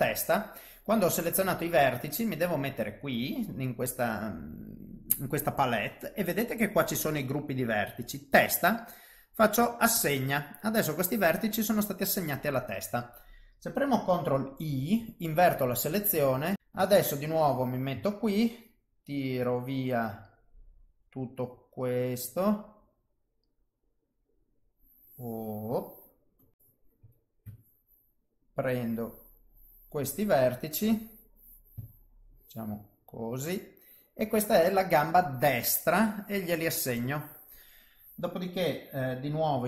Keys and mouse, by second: 2.2 click, 10.0 click, 14.7 ctrl+i, 16.6 click, 16.6 middle click, 16.7 KP_1, 18.2 ctrl+shift+right click, 26.5 shift+middle click, 26.5 KP_3, 26.5 KP_1, 27.6 ctrl+shift+right click, 31.8 ctrl+shift+right click, 35.3 click, 36.9 click.